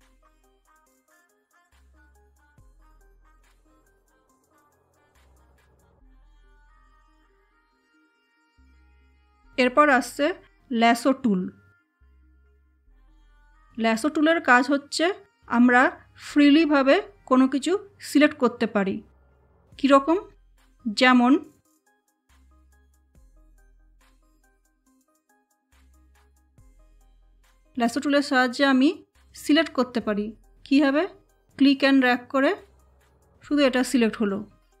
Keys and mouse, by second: 1.1 space, 1.2 click, 1.3 space, 4.8 click, 23.3 super+Num_Lock, 25.0 space, 25.6 space, 29.2-34.8 drag.